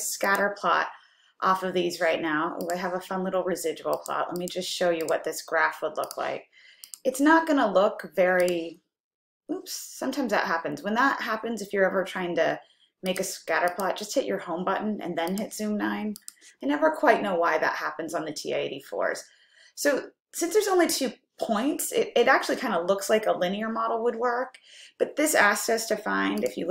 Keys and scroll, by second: 2.7 Return, 4.0 Down, 4.5 Down, 7.0 2, 16.2 9.